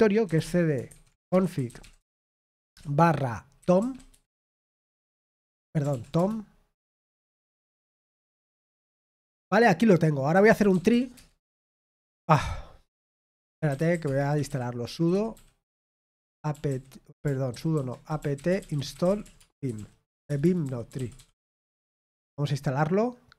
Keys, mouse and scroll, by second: 1.2-2.8 typing, 6.1 BackSpace, 17.2-21.6 typing, 17.7 ctrl+w.